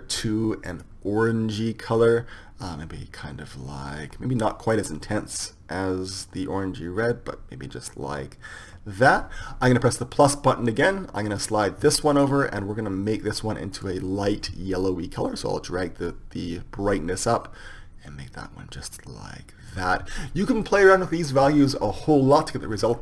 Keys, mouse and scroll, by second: 10.8-16.4 drag.